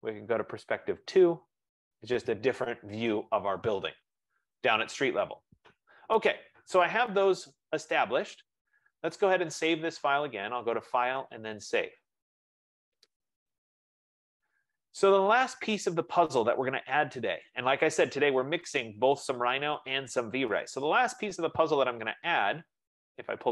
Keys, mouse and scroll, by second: 1.0 click, 10.5 click, 12.1 click, 22.8-23.5 drag.